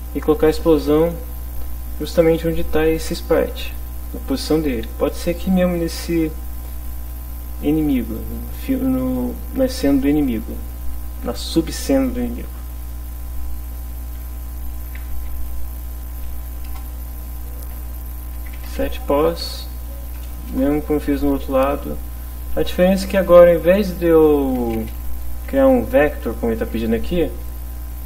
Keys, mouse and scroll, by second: 14.9 e, 15.1 x, 16.5 Down, 16.7 Return, 17.7-19.4 typing, 20.3 Down, 20.5 Return, 23.7 shift+0, 24.4 Left, 24.6 space, 25.0 BackSpace.